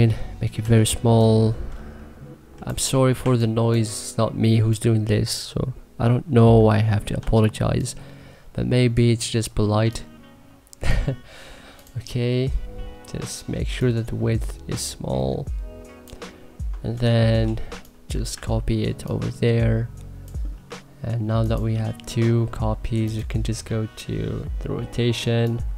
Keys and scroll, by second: 0.4 t, 3.0 2, 6.1 e, 17.5 1.